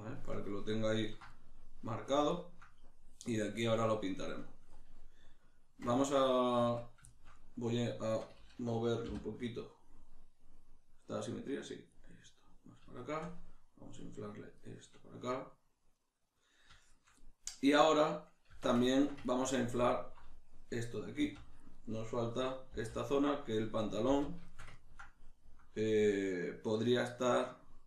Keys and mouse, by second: 6.6 Tab, 7.1 shift+middle click, 8.0-11.3 shift+middle drag, 9.1 g, 11.3 click, 12.1-14.0 middle drag, 14.0 click, 14.6-19.9 middle drag, 18.5 Tab, 19.9 alt+right click, 21.2 z, 21.8-27.8 middle drag, 22.7 b.